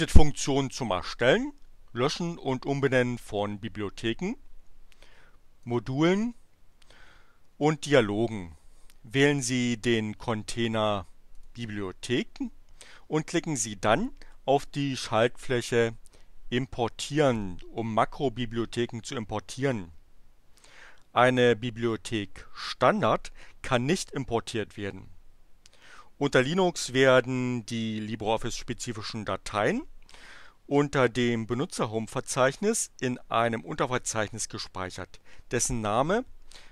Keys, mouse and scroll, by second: 5.6 click, 7.7 click, 11.3 click, 17.3 click.